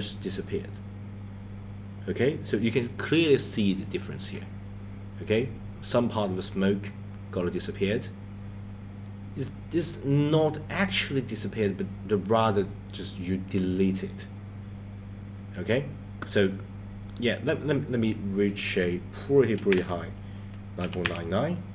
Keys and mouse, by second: 17.2 click, 18.6-21.7 drag, 21.0 KP_9.